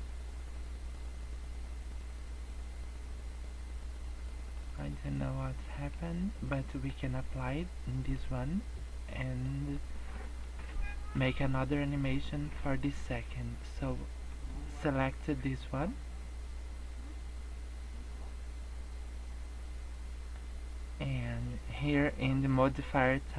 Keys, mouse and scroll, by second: 4.9 middle click, 5.6 middle click, 6.4 middle click, 7.9 middle click, 9.4 middle click, 10.1 middle click, 14.3 click, 15.3 middle click, 22.5 click.